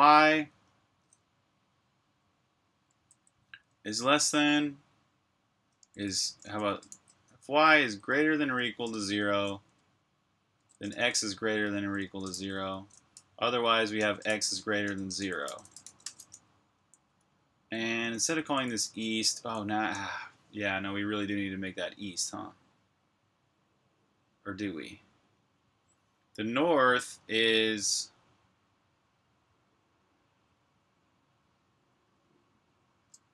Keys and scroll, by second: 2.8-3.9 typing, 5.6-9.0 typing, 10.4-17.5 typing, 21.3 typing.